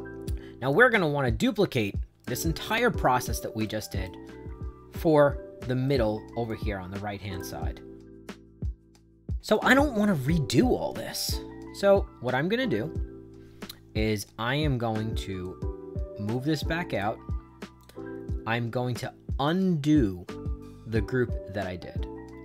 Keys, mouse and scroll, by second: 1.7 right click, 3.6 right click, 5.3 middle click, 5.8 right click, 7.2 click, 7.9 right click, 8.9 right click, 15.4-16.9 drag, 17.7 click.